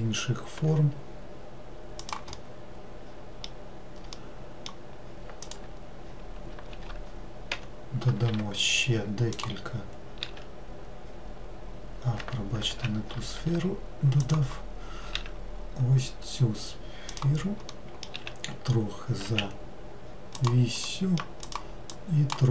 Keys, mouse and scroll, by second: 1.3 g, 2.4-5.5 middle drag, 5.5 click, 17.7 middle click, 18.2 s, 20.9 middle click, 21.5 click, 22.0 click.